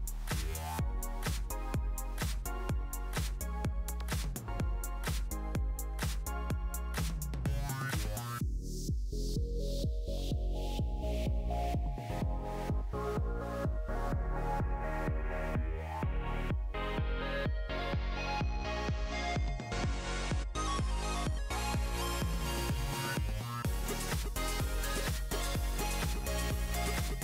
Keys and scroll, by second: 25.5-27.2 typing.